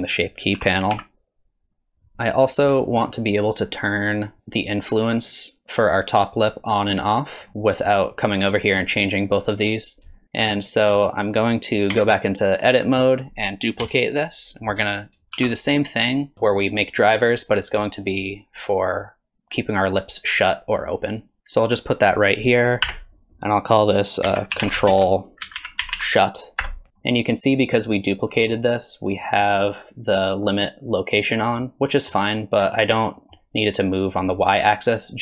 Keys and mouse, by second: 0.5 r, 2.2 click, 3.9 click, 10.1 shift+click, 10.4 click, 11.9 Tab, 12.6 click, 13.8 KP_3, 15.3 shift+d, 16.3-17.5 drag, 19.8-21.5 drag, 22.8 F2, 26.9 Tab, 27.0 click, 28.3 middle click, 29.6 click, 31.6-32.1 middle drag, 33.2 middle click, 33.9 click.